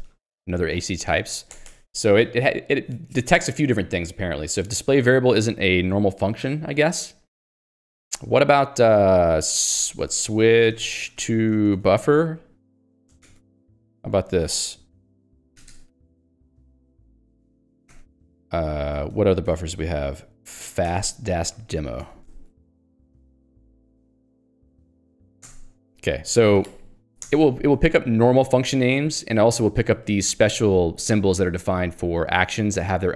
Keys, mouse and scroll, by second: 0.0-0.3 typing, 1.6 ctrl+g, 1.9 Escape, 5.4 click, 9.0 Escape, 10.3-12.4 typing, 13.3 ctrl+g, 13.7-18.4 typing, 14.4 Return, 19.0 Escape, 19.6 ctrl+alt+j, 21.0 ctrl+g, 21.5-25.0 typing, 25.5 alt+Return, 26.3 Escape, 27.3 Return, 27.8 Escape, 27.9 h, 29.2 k.